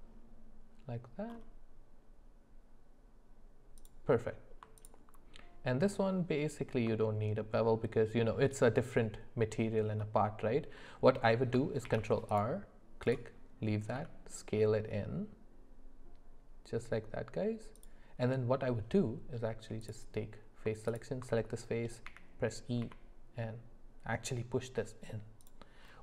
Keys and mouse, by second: 7.0 shift+middle click, 10.0 middle click, 11.9 ctrl+r, 14.0 s.